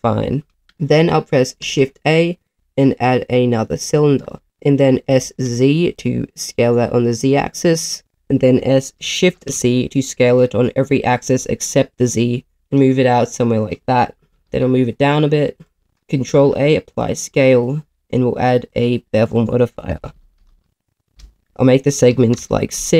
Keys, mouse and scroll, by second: 1.6 shift+a, 5.0 s, 5.3 z, 8.0 click, 8.6 s, 9.2 shift+z, 12.5 click, 14.3 g, 14.4 z, 15.0 click, 16.3 ctrl+a, 18.0 click, 18.7-21.2 drag, 20.5 e, 21.4 click.